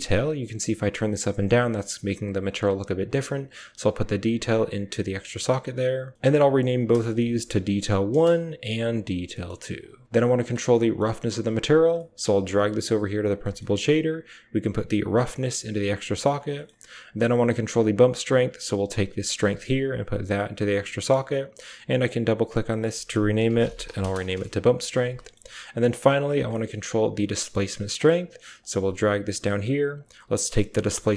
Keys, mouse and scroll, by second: 0.2-2.7 drag, 3.8-4.8 drag, 3.8-5.3 typing, 6.2 click, 7.3-8.5 drag, 9.2 click, 9.6 click, 9.8 g, 10.7 click, 11.7 click, 12.0-13.5 typing, 13.3 click, 14.5-15.8 drag, 14.6-17.4 typing, 15.9 drag, 18.5 click, 18.8-21.2 typing, 19.7 click, 20.5 click, 21.8-24.1 drag, 25.1 click, 25.8 click, 26.4 click, 26.4 typing, 28.4 click, 29.8 click.